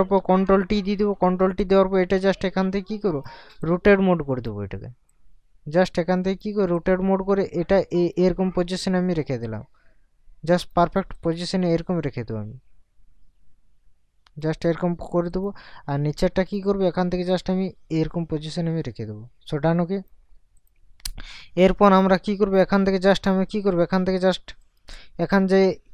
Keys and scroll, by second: 0.2 ctrl+t.